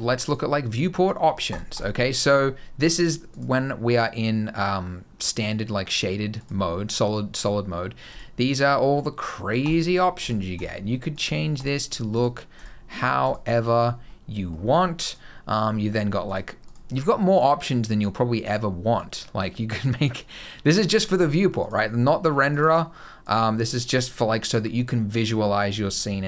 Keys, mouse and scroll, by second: 0.1 click, 1.6 click, 3.1 click, 6.2 click, 13.9 middle click, 14.9 click, 21.4 click, 24.6 middle click.